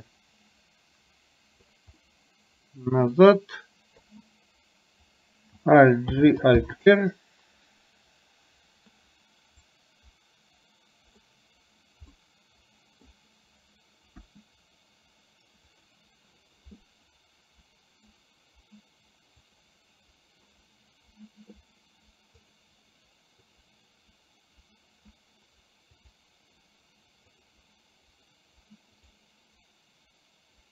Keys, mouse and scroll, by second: 2.0-3.1 middle drag, 4.1 KP_3, 6.1 alt+g, 6.7 alt+r, 9.9-11.4 drag, 12.2-13.2 middle drag, 14.4 KP_1, 19.6 click, 26.1 click, 27.4 click.